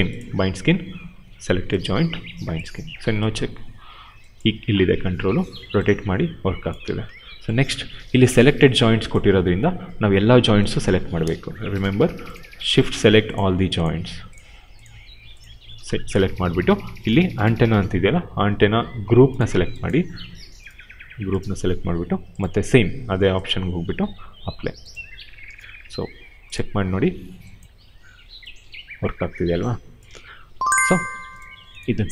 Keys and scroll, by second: 4.8 e, 6.8 ctrl+z, 10.8 q, 27.7 e, 30.0 ctrl+z.